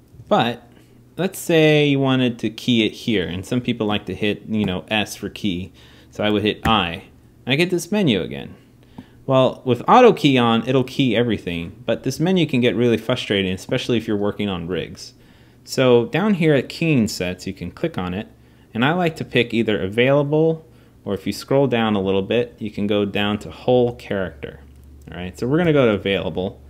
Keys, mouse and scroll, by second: 0.0 alt+a, 1.4-26.6 drag.